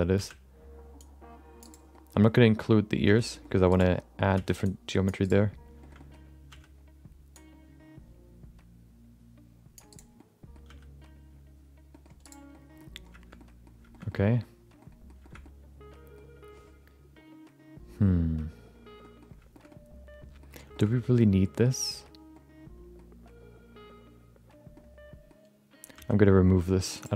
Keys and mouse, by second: 0.1 c, 1.9 middle click, 2.4 middle click, 3.0 c, 3.9 middle click, 4.3 c, 5.8 shift+middle click, 5.9 middle click, 6.5 c, 10.1 middle click, 10.6 c, 12.5 middle click, 13.3 middle click, 13.9 shift+middle click, 14.0 middle click, 14.7 middle click, 15.2 middle click, 15.4 middle click, 19.0 middle click, 19.5 shift+middle click, 19.6 middle click, 20.7 shift+middle click, 22.3 middle click, 24.7 middle click, 25.9 c.